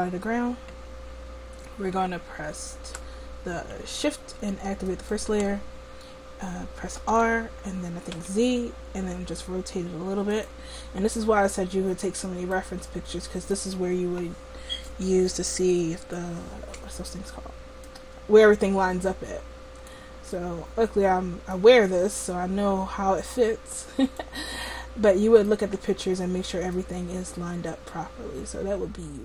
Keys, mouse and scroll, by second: 4.9-7.2 drag, 7.2 r, 11.2-13.0 middle drag, 14.9-19.7 drag, 20.4 middle click, 22.3-24.3 drag, 24.6-26.8 middle drag, 26.8-28.8 drag.